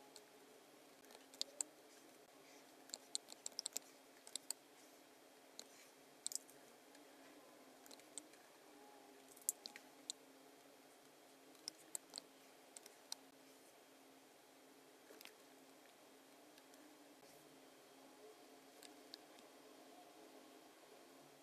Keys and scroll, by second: 1.4 space, 4.3 space, 11.6 space, 12.8 space, 14.9-15.7 typing, 18.8 v, 19.3 v.